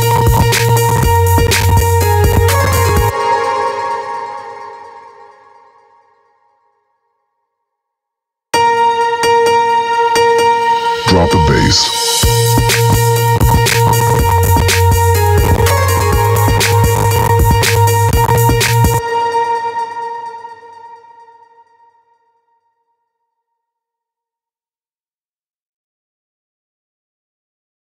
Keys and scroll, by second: 2.5 space, 7.9 space, 18.4 space.